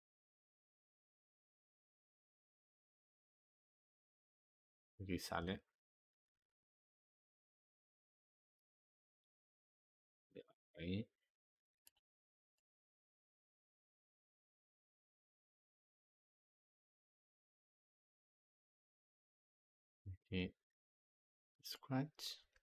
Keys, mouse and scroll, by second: 1.3 click, 1.4 g, 3.2-5.3 drag, 5.3 g, 9.4 click, 9.6 g, 12.4-14.5 drag, 14.5 g, 16.6-19.8 drag, 22.3 g.